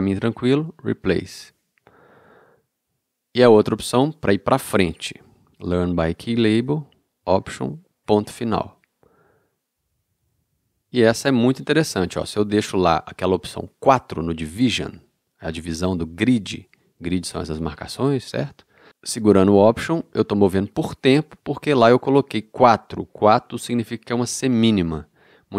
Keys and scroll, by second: 8.0 alt+., 20.0 alt+., 21.0 alt+,.